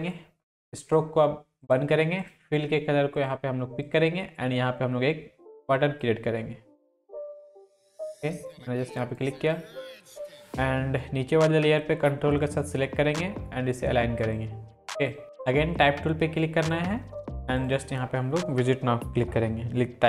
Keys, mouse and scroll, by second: 6.0-9.4 drag, 10.5-11.6 scroll down 2, 12.4 ctrl+click, 15.2-16.7 drag.